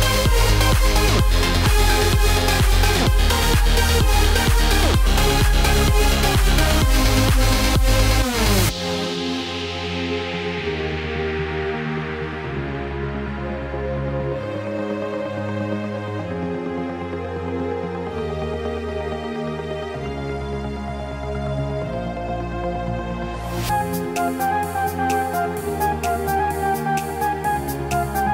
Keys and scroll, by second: 17.8 ctrl+z, 23.9 ctrl+alt+z.